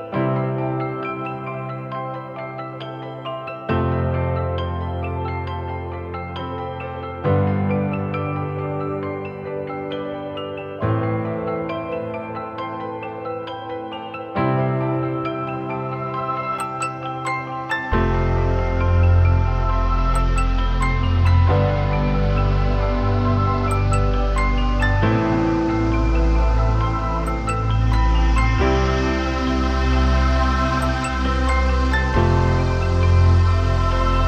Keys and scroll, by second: 4.0 ctrl+j, 8.6 ctrl+i, 28.4 ctrl+alt+shift+e.